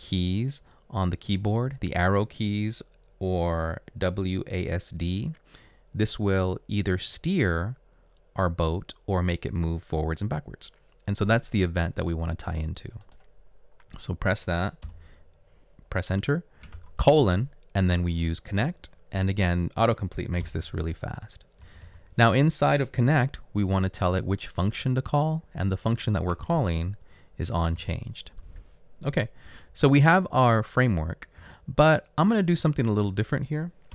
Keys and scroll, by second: 14.9 Return, 16.7 shift+;, 20.4 typing, 21.7 space, 23.5 typing, 26.2-26.9 typing, 27.8 Return, 29.5 Up, 30.0 Up, 31.5 Up, 31.9 Left, 32.4 Left, 33.1 Left.